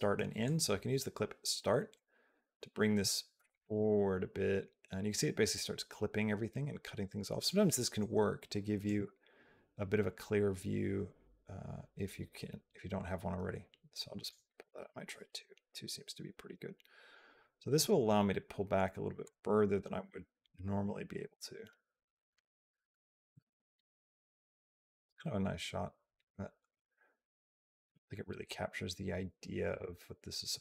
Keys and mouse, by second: 0.4 click, 3.8 click.